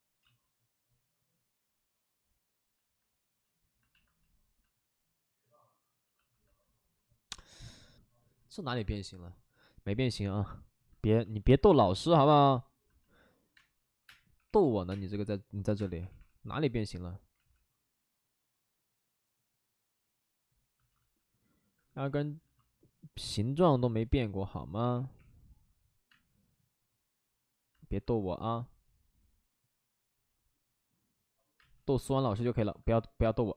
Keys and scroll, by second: 2.8 ctrl+z, 13.5-16.1 typing, 17.3 ctrl+z, 20.9 ctrl+z, 21.6 alt+s, 22.7 alt+s, 23.7 alt+s, 24.8 3, 25.1 3, 26.0 space, 27.7 alt+s, 29.6 alt+s, 31.5 space, 31.8 ctrl+z, 31.9 ctrl+z.